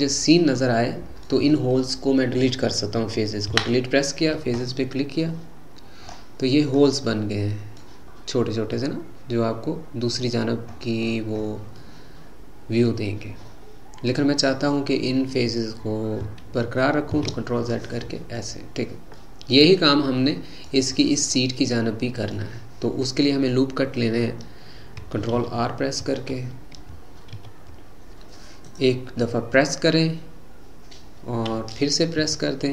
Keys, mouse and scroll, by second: 3.5 Delete, 5.6-6.1 scroll down 2, 6.1-7.1 scroll up 8, 7.1-8.2 middle drag, 8.2-8.8 scroll up 3, 8.8-10.5 middle drag, 10.5-11.8 scroll down 13, 11.8-14.3 middle drag, 14.3-16.4 scroll down 3, 17.2 ctrl+z, 17.7-18.7 middle drag, 18.7 scroll down 1, 19.2-21.1 middle drag, 21.1-21.4 scroll down 2, 21.4-24.6 middle drag, 25.4 ctrl+t, 26.4 Escape, 27.4 ctrl+r.